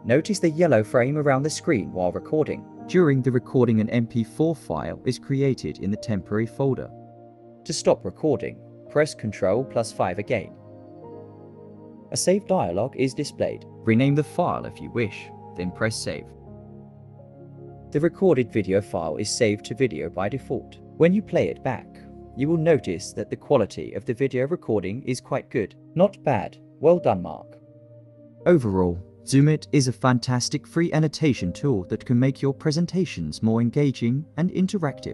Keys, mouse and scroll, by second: 3.3-6.5 typing, 10.6 ctrl+5, 19.1 super+e, 23.4 double click, 24.1 double click, 32.9-35.1 typing.